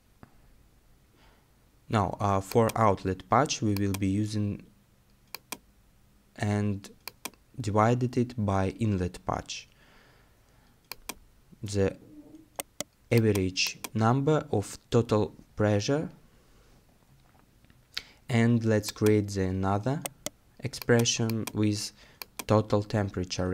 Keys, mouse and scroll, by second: 12.6 right click, 20.1 right click.